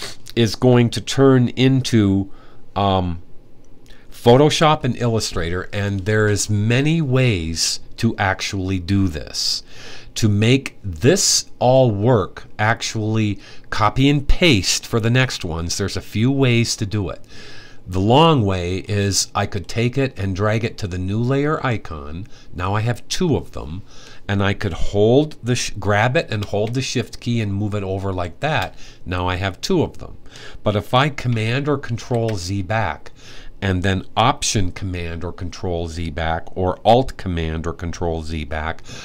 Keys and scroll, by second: 31.7 super+z, 32.2 super+z.